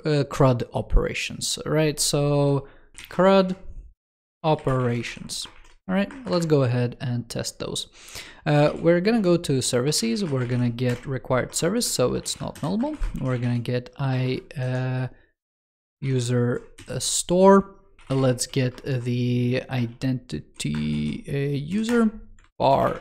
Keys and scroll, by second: 22.3 super+Right.